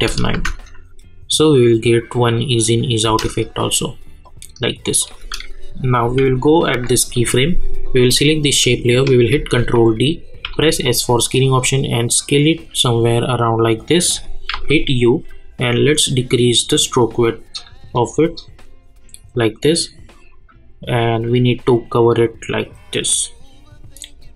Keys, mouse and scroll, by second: 0.0 click, 0.3 space, 3.0 space, 4.2 click, 6.0 k, 8.7 click, 9.3 ctrl+d, 10.4 s, 11.3-14.5 drag, 14.5 u, 15.7-24.3 drag.